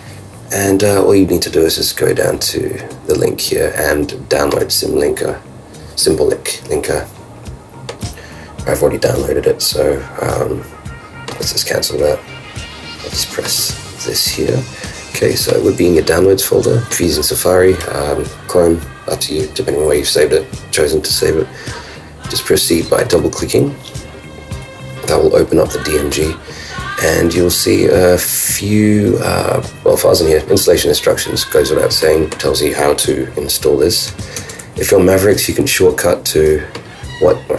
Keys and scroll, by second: 34.4 super+w.